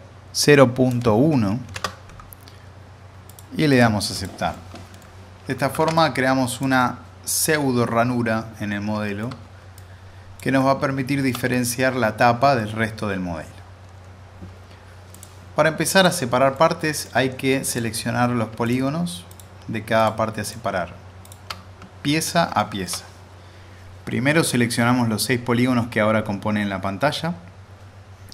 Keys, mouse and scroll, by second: 0.8-1.1 drag, 4.5-5.6 middle click, 5.8 alt+z, 5.9-9.3 click, 6.8-9.7 alt+middle drag, 9.7-10.4 click, 10.6-11.5 middle drag, 15.1 click, 16.8 alt+middle click, 17.7 click, 22.6 alt+middle click.